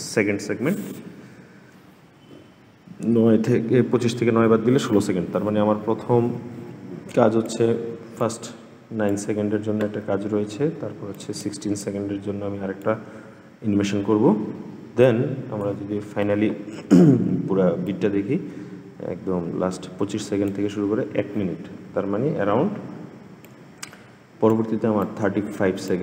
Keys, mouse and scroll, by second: 7.2-14.6 drag, 14.8 click, 15.6-17.6 scroll down 20, 17.6-26.0 drag.